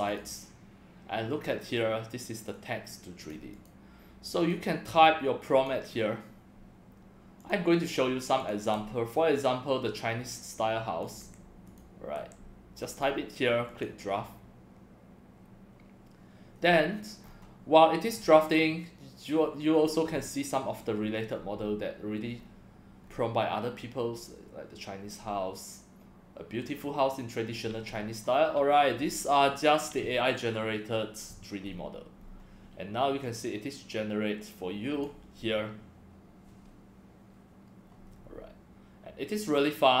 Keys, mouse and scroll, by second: 11.2 ctrl+c, 12.2 ctrl+v, 13.7 click, 16.6 scroll down 5, 17.2 scroll up 3, 18.1 scroll down 6, 22.4 scroll up 1, 25.1 scroll up 3, 28.0 scroll up 1, 29.0-29.6 scroll down 3, 31.6 scroll up 3, 31.9 middle click, 31.9 scroll down 1, 32.2 scroll up 2, 33.2-35.0 drag, 38.1 scroll down 1, 39.4-40.0 drag.